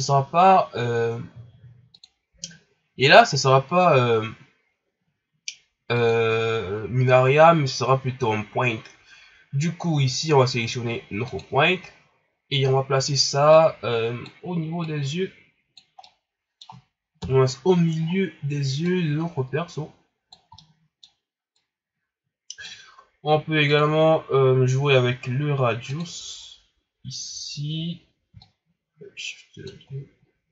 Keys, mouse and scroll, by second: 11.2 click, 12.4 scroll up 2, 13.5-16.0 drag, 16.0-17.2 middle drag, 17.2 KP_1, 18.0 scroll up 3, 18.8-20.5 drag, 20.5-21.6 middle drag, 21.6-30.2 drag, 30.2-30.5 scroll down 7.